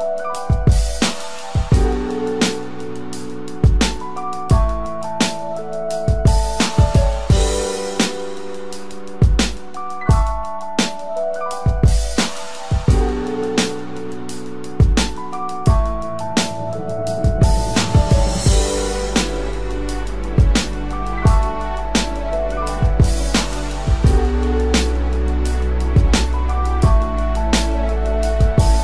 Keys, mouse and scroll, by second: 6.3 ctrl+t, 8.7 alt+shift+click, 12.2 alt+shift+click, 16.3 Return, 17.9 ctrl+t.